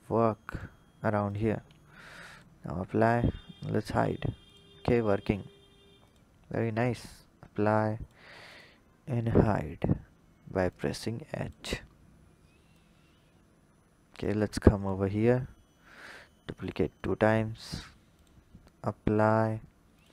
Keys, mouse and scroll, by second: 1.0 click, 2.1 click, 3.6 h, 4.3 drag, 5.8 click, 7.8-8.4 drag, 9.0 h, 10.5 click, 11.8-12.5 scroll down 1, 12.5-14.6 drag, 15.7-16.5 drag, 19.0 click.